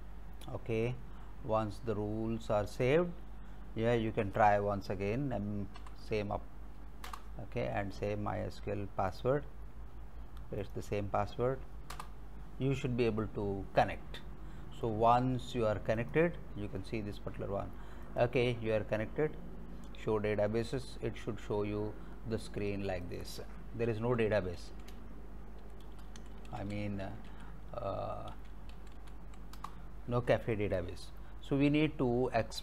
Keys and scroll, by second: 5.8 Up, 7.1 Return, 12.0 Return, 24.3-29.7 typing.